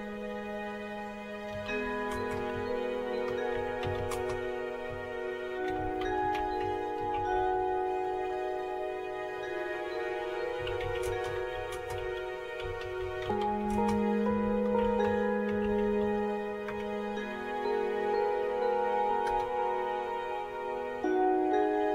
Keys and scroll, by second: 1.3-8.6 typing, 10.3-17.2 typing, 19.0-19.8 typing.